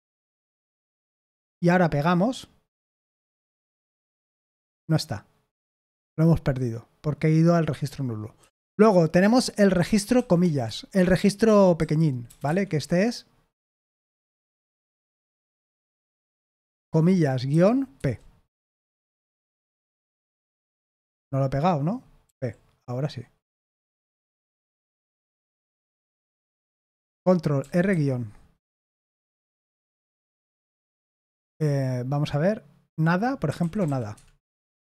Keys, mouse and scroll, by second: 1.1 Escape, 3.6 shift+p, 8.3 Escape, 10.1-12.4 typing, 21.9-23.7 typing, 24.0 Return, 24.2 Return, 27.6 ctrl+r, 27.9 -, 30.9 i, 33.2-34.9 typing.